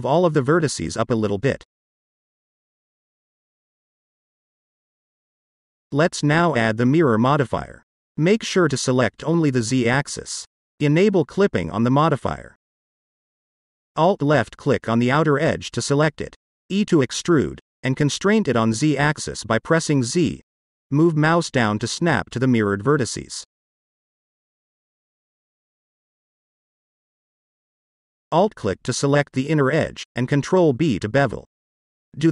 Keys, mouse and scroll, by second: 2.2 click, 2.8-4.7 middle drag, 5.9 click, 6.6-9.7 drag, 10.8 click, 11.4 click, 12.6 click, 13.6 middle click, 15.5 alt+click, 16.8 alt+click, 17.7-20.1 middle drag, 20.8 e, 22.4 z, 23.7 click, 24.2 middle click, 26.1 click, 26.6 alt+click, 27.1 alt+click, 27.7 alt+click, 29.2 ctrl+b, 30.7 click, 31.6 click, 32.2 alt+click.